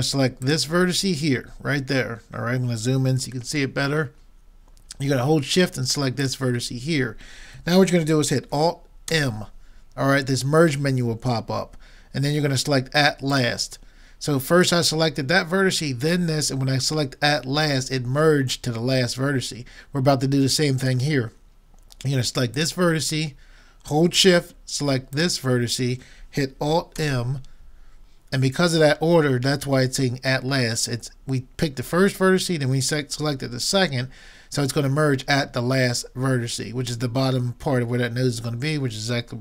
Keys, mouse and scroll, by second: 0.4-2.2 drag, 2.3 middle click, 3.6-5.4 middle drag, 6.2-8.0 drag, 9.2 alt+m, 22.6-24.4 drag, 25.2-27.0 drag, 27.0 alt+m.